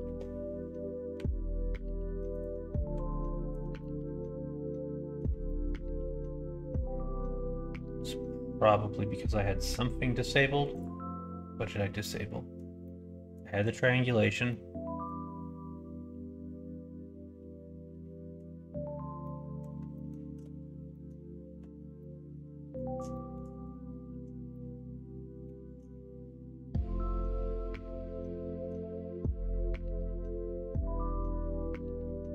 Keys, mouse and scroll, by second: 3.1 alt+click, 3.7-5.2 middle drag, 5.4 shift+middle click, 12.8 middle click, 13.6 click, 14.4 middle click, 19.2 middle click, 19.9 shift+middle click, 20.8 middle click, 21.5 Tab, 21.9 middle click, 23.1 shift+middle click, 24.5 shift+middle click.